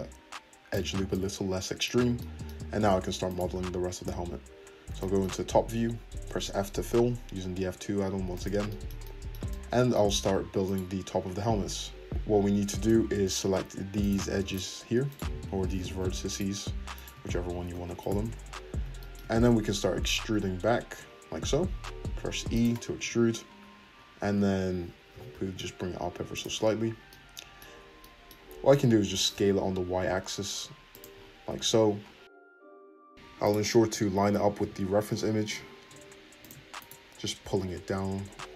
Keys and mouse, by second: 2.3 middle click, 3.2 click, 3.3-10.6 middle drag, 4.2 `, 6.3 f, 10.6 click, 10.7-14.0 middle drag, 11.0 `, 14.0 shift+click, 15.1 shift+click, 15.9 ctrl+z, 16.3 shift+click, 16.9 shift+click, 17.7 ctrl+z, 18.0 shift+click, 18.3 `, 20.3-22.7 drag, 20.3 e, 22.7 middle click, 22.8-28.0 drag, 23.0 `, 25.1 g, 29.0 s, 31.5 `, 33.1 click, 34.6 g, 36.8 click, 37.1-38.5 middle drag, 37.4 g.